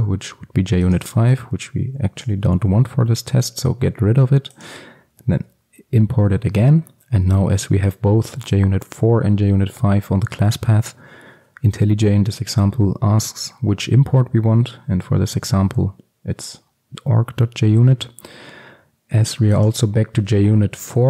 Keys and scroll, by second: 2.7 ctrl+x, 5.4 alt+Return.